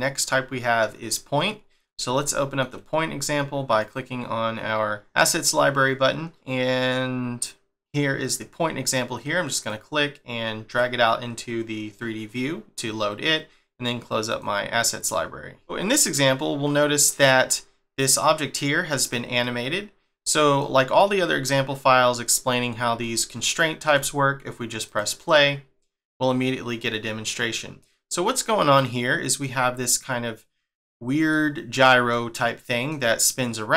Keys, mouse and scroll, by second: 2.2 shift+middle click, 3.8 click, 5.8 scroll down 1, 7.5 scroll down 4, 7.6 scroll up 3, 9.7 click, 15.6 shift+middle click, 15.7 scroll down 1, 16.2 middle click, 19.4 middle click, 23.0 shift+middle click, 24.9 click, 28.8 middle click, 31.3 middle click, 32.1 middle click.